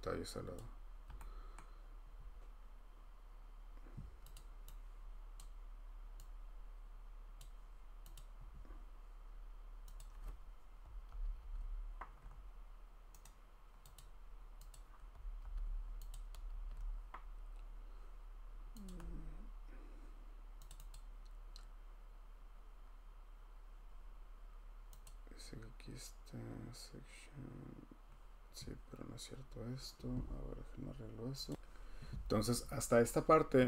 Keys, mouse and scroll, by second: 0.5 click, 1.6 scroll, 4.3 click, 5.6 click, 7.4 click, 8.1 click, 10.0 click, 11.1 ctrl+c, 11.4 ctrl+v, 13.2 right click, 14.0 click, 14.7 click, 15.4 ctrl+c, 16.1 click, 16.5 ctrl+v, 18.8 click, 20.7 click, 20.9 click, 25.0 click, 26.9 click, 31.5 click.